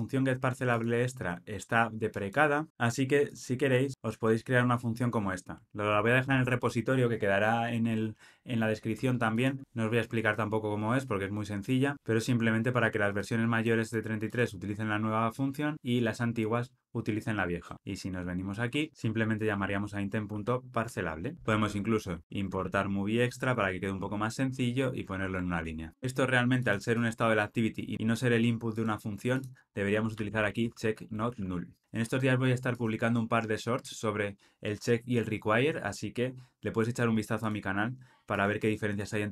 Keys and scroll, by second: 6.3 super+v, 20.8 Tab, 21.3 alt+Return, 25.1 alt+super+l, 25.5 ctrl+alt+o.